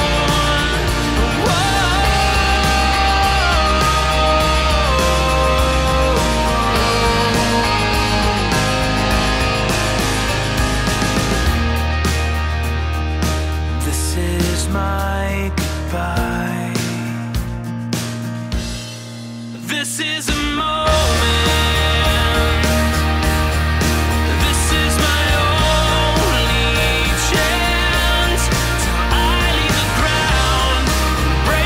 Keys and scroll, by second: 0.2 super+z, 5.5 scroll, 5.7 super+z, 6.4 super+z, 9.0 scroll, 11.3 super+z, 13.9 super+z, 23.2 super+z, 24.3 super+z, 30.9 super+z, 31.1 super+z.